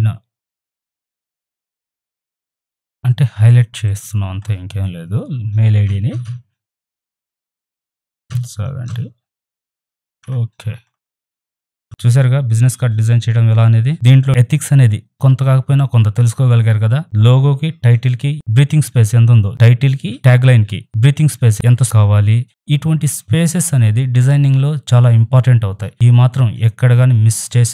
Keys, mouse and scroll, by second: 0.7 click, 2.3 click, 2.8 ctrl+a, 3.9 click, 7.1 Tab, 10.2 Return.